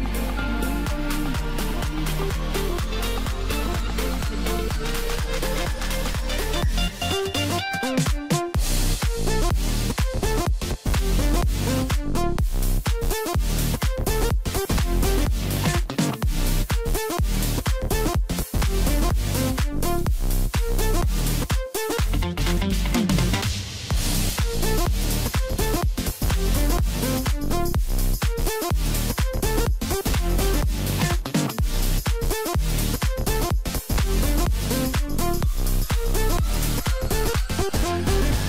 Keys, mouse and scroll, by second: 1.4 scroll up 1, 2.4 Tab, 3.0-3.7 scroll down 1, 3.7 a, 5.1 g, 8.3 s, 12.2 g, 15.5 scroll down 4, 15.7 middle click, 16.5-17.5 scroll up 2, 17.5-20.0 middle drag, 20.0 click, 20.3-22.2 middle drag, 22.2 Tab, 22.8 KP_1, 23.4-24.2 scroll up 4, 24.2 g, 27.0 scroll down 3, 27.2-30.7 middle drag, 30.7 KP_1, 31.3 scroll down 1, 31.5-32.7 middle drag, 32.7 KP_1, 33.5-34.1 scroll up 2, 34.1-34.6 scroll down 1, 34.6-36.0 middle drag, 36.0-38.2 drag, 38.2-38.4 scroll up 1.